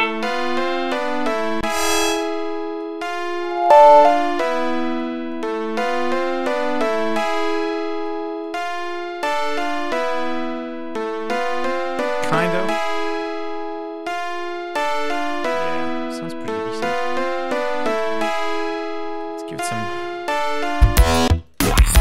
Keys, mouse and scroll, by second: 1.4-2.9 drag, 3.2-5.1 drag, 5.2-7.0 drag, 7.4 click, 8.3 click, 9.4 click, 10.2-11.3 drag, 13.0 click, 16.4 right click, 19.0 click, 20.7 click, 21.2 space, 21.3 click.